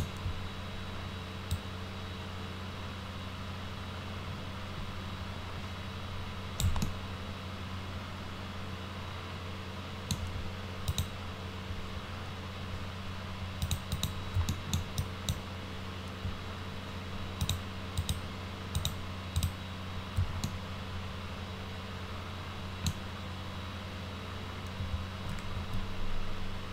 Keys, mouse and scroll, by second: 1.6-6.6 drag, 6.8-8.2 alt+middle drag, 8.2-10.1 alt+right drag, 10.9 middle click, 13.6 click, 13.9 click, 14.5 alt+middle drag, 15.0 alt+drag, 17.4 click, 18.0 click, 18.8 click, 19.4 click, 20.4-22.9 alt+middle drag, 25.6 ctrl+z.